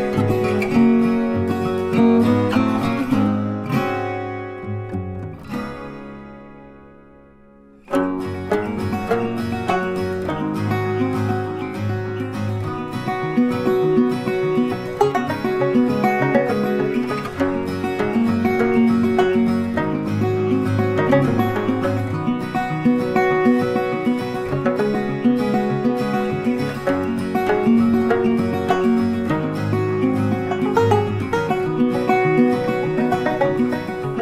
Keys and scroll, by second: 10.3 ctrl+t, 27.7 ctrl+t.